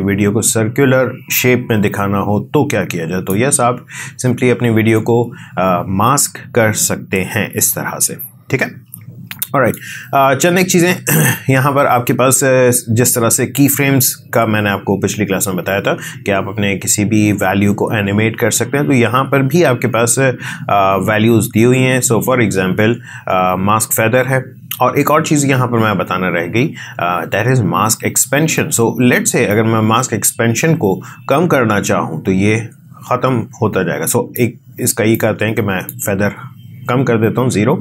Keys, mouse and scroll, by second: 7.5 space, 9.3-13.6 drag, 29.5-37.8 drag.